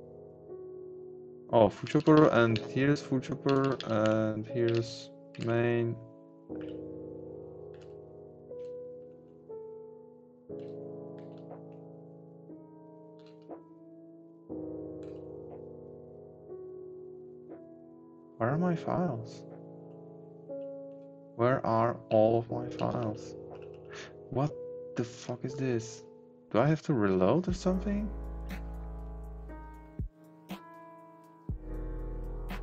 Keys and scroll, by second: 1.8 Down, 2.5 Right, 3.4 Down, 4.0 Right, 4.6 Down, 4.7 Right, 5.4 Right, 6.6 Left, 7.7 Down, 8.6 Left, 9.0 Up, 9.1 Right, 10.6 Left, 11.6 Down, 13.2 Down, 15.0 Left, 19.9 Down, 20.8 Down, 22.0 Right, 22.9 Down, 23.5 Up.